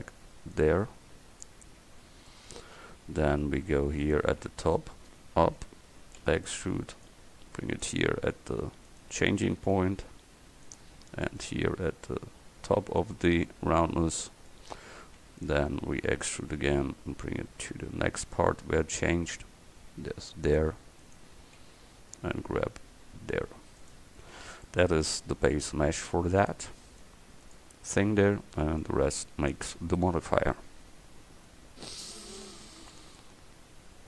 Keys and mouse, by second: 2.4-3.5 middle drag, 4.1-5.7 right drag, 6.3 e, 9.8 g, 11.6 g, 15.5 right click, 16.4 e, 21.1 right click, 22.1 g, 24.3 middle click, 24.8 middle click, 25.4 Tab, 32.4-34.0 right drag.